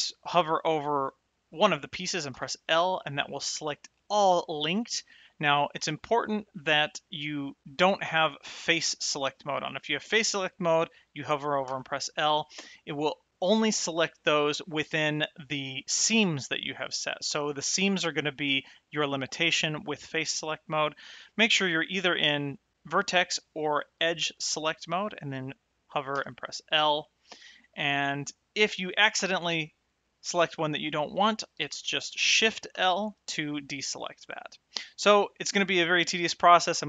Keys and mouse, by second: 8.6 click, 12.0 l, 21.8 click, 23.9 click, 26.3 l, 29.7 l, 32.4 shift+l.